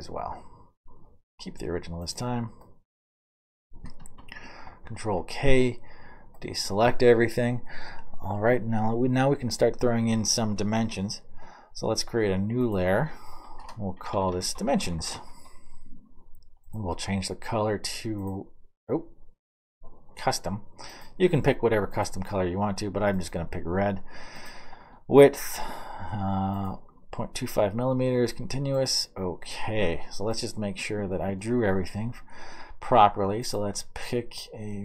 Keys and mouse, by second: 0.0-2.9 middle drag, 4.9 ctrl+k, 5.8-12.7 middle drag, 13.2-16.1 middle drag, 13.9-15.6 typing, 29.7 middle click, 30.6 middle click.